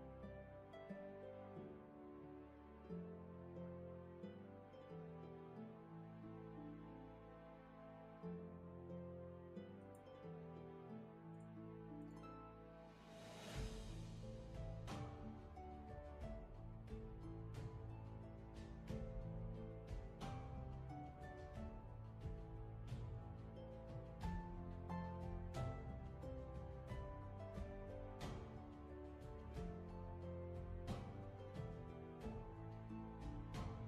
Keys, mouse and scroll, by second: 14.4 ctrl+z, 23.1 ctrl+z, 25.4 ctrl+z, 28.9 ctrl+z, 29.9 ctrl+shift+z.